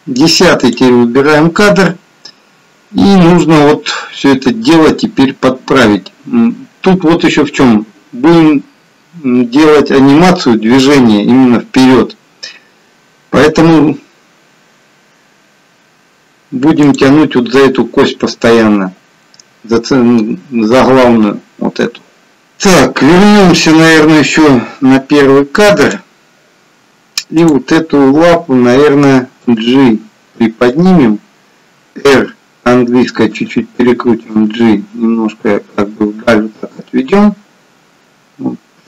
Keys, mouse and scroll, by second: 16.8 click, 22.3 click, 23.6 click, 27.7 click, 29.5 g, 32.3 r, 34.4 g.